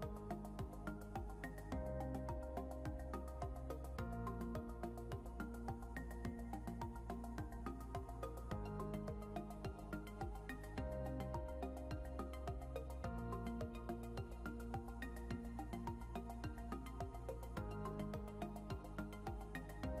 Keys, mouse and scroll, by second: 2.3 scroll up 1, 3.2 click, 5.3 scroll up 1, 5.9 click, 11.7 scroll down 1, 12.5 click, 14.2 scroll down 1, 14.9 click, 15.2 scroll down 1, 16.2 click, 17.2 scroll up 1, 18.6 click.